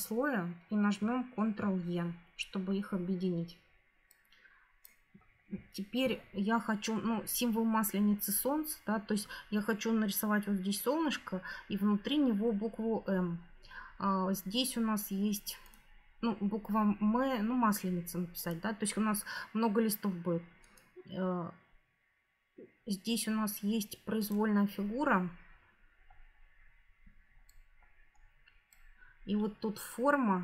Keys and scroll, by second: 1.3 ctrl+e.